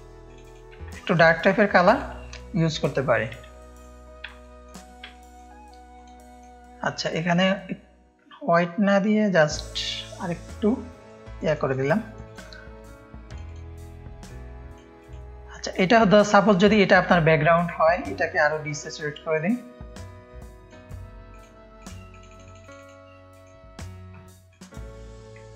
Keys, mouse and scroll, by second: 0.9 click, 0.9 space, 1.6 space, 1.7 click, 3.1 click, 3.5 space, 4.3 space, 4.4 click, 5.1 click, 5.9-7.4 drag, 10.0-11.8 drag, 12.0 click, 12.0 space, 12.7 click, 13.4 click, 14.2 click, 14.9 click, 16.0 click, 16.9 click, 18.2 click, 19.5-20.6 drag, 21.3-22.3 drag, 22.7 click, 23.3 click.